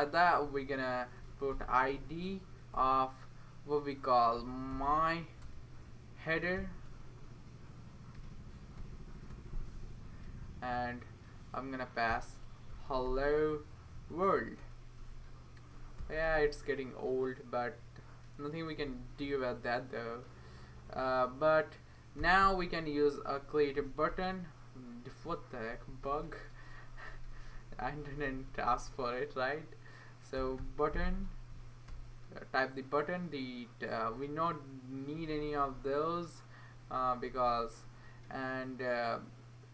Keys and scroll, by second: 0.4 Left, 1.2-2.4 typing, 2.7 Return, 4.4-9.3 typing, 10.2 Right, 10.7 Right, 11.8-16.7 typing, 18.1-18.8 typing, 18.8 Right, 19.2 Right, 19.4 Right, 20.5 Right, 20.8 Right, 21.9-22.9 typing, 23.8 Up, 24.1 Return, 25.3 Right, 25.7 Right, 25.9 Right, 26.1 Right, 26.5 BackSpace, 30.1-31.1 typing, 31.5 Down, 31.9 Return, 34.4 Right, 34.9 Right, 34.9 Right, 35.0 Right, 35.3-39.7 Right, 39.2 BackSpace, 39.2 BackSpace, 39.3 BackSpace, 39.4 BackSpace.